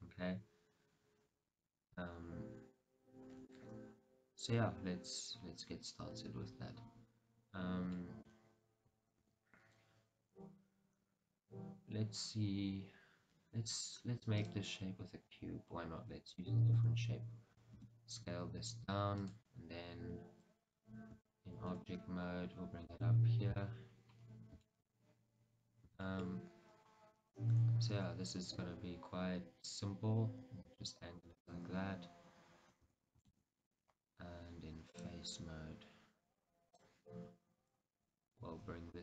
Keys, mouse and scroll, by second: 1.9 scroll down 1, 5.9-6.3 scroll up 1, 8.0 shift+middle click, 9.2 shift+a, 16.5-19.4 middle drag, 16.5-16.9 scroll, 16.9 Tab, 17.9 s, 19.4 click, 21.2 Tab, 21.8 g, 23.0 click, 23.8-24.2 scroll, 24.7-31.6 shift+middle drag, 25.0 scroll, 28.0 r, 31.6 click, 33.0 Tab, 33.4 shift+z, 35.0 click, 38.5 g.